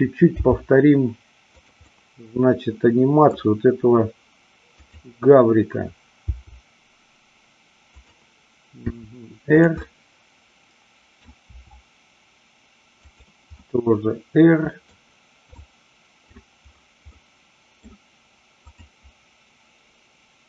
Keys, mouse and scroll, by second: 0.4 g, 1.6 click, 1.8-3.4 middle drag, 4.7 click, 6.2 g, 8.0 click, 8.8 r, 9.8-11.1 middle drag, 13.1 click, 13.6-15.0 middle drag, 15.5-16.4 middle drag, 17.2 middle click, 18.6-19.8 drag.